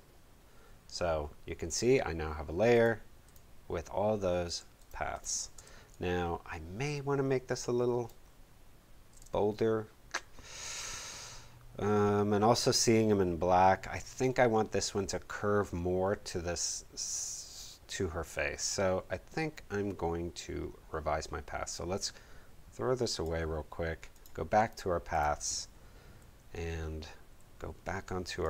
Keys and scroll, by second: 5.5 space, 26.2 a, 27.3 a.